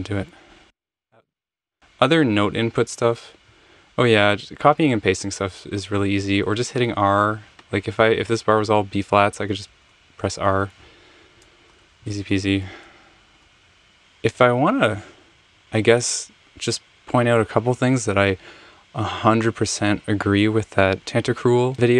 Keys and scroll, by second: 9.3 r, 9.5 r, 9.6 r, 9.8 r, 11.8 super+z, 11.8 typing, 12.1 super+z, 12.3 super+z.